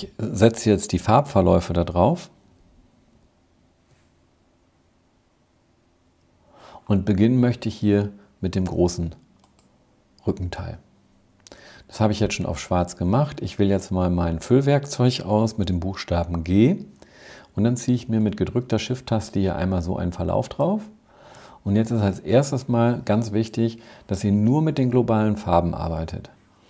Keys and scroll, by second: 0.7 super+-, 1.7 super+-, 2.1 super+-, 16.5 g.